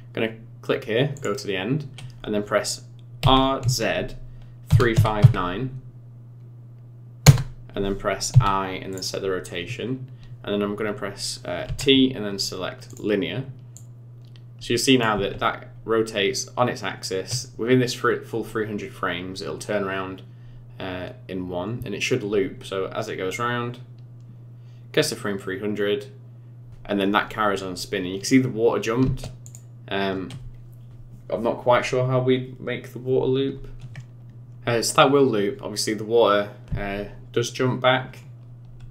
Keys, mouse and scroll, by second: 1.1 click, 3.2 r, 11.6 t, 13.7 click, 15.1 space, 29.1 space, 29.4 click, 34.2 space, 36.8 space.